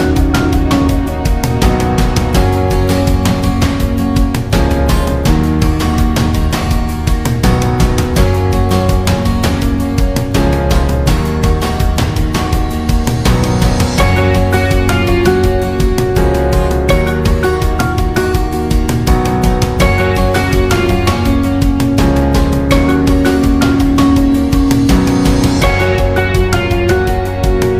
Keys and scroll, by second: 5.9 Up, 6.2 Down, 6.4 Down, 6.6 Down, 6.9 Down.